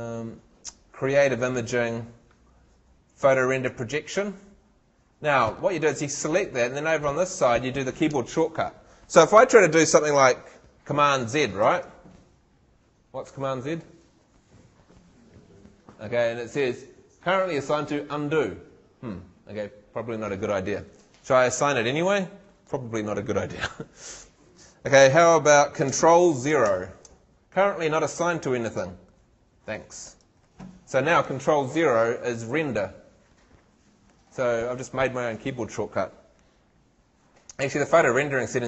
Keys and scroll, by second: 11.6 shift+super+z, 26.7 ctrl+shift+0.